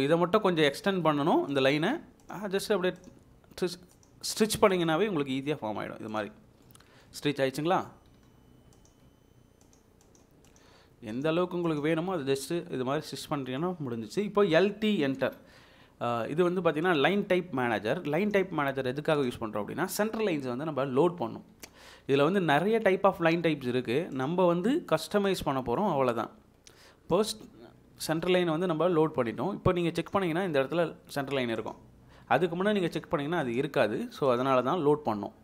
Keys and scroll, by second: 0.2 Escape, 3.2 Escape, 6.3 Escape, 11.8 Escape, 14.8-15.3 typing.